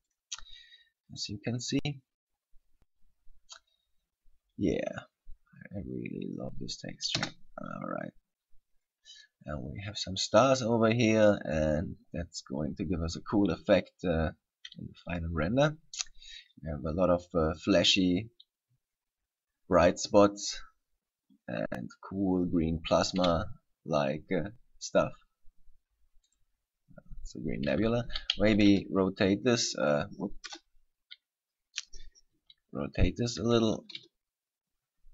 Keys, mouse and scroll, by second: 0.3 click, 7.4 KP_0, 23.3 KP_7, 26.5 right click, 28.3 r, 30.0 right click, 30.7 KP_0, 32.7 r.